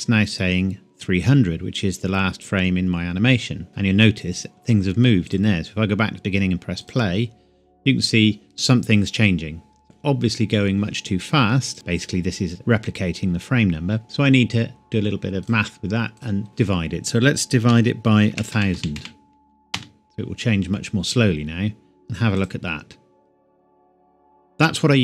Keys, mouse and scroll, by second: 5.2 click, 11.7 click, 14.0 click, 17.7-18.9 typing, 19.7 Return, 22.3 click.